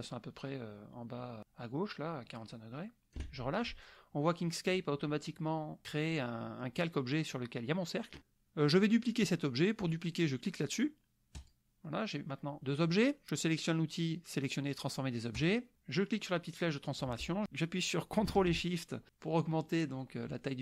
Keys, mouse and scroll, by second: 11.4 click, 15.4 click, 16.8-20.6 drag.